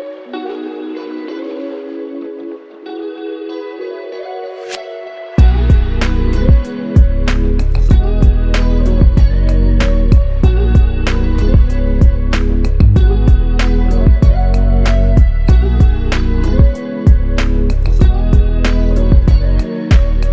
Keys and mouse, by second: 4.7 alt+click, 9.5 alt+click, 11.3 alt+shift+click, 12.2 typing, 13.0 double click, 14.8 shift+click, 16.5 g, 18.4 double click.